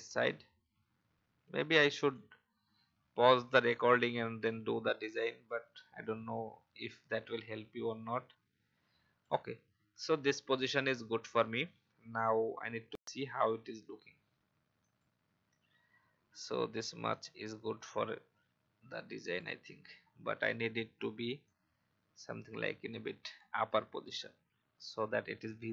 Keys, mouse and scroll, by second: 2.1-9.2 shift+drag, 14.8-25.7 drag.